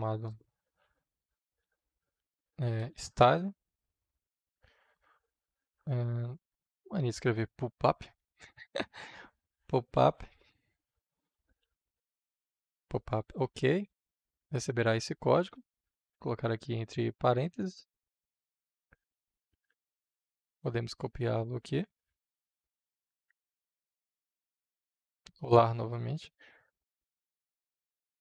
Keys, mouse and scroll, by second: 0.5-5.4 typing, 5.8 Return, 6.9 o, 8.1 p, 9.8 u, 10.1 p, 11.3 space, 11.9 Return, 12.9-14.6 typing, 16.4 shift+9, 17.5 ctrl+v, 19.4-21.4 drag, 21.9 ctrl+c, 22.4-23.8 drag, 23.8 Tab, 25.1 ctrl+v, 26.9-28.2 drag.